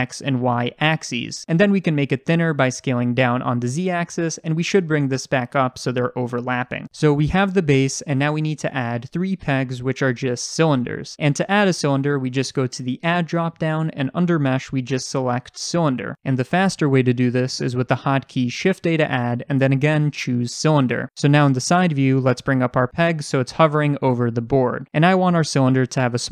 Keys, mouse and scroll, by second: 1.4 click, 2.1-4.3 middle drag, 2.6 s, 4.8 click, 5.2-5.6 scroll up 1, 5.6 g, 8.4 click, 8.8-11.1 middle drag, 9.7-11.1 scroll down 1, 11.1 click, 12.9-16.7 drag, 16.3 ctrl+z, 16.7-21.7 shift+middle drag, 18.6 shift+a, 21.7 click, 22.1 scroll up 1, 22.4-26.3 shift+middle drag, 23.3 g.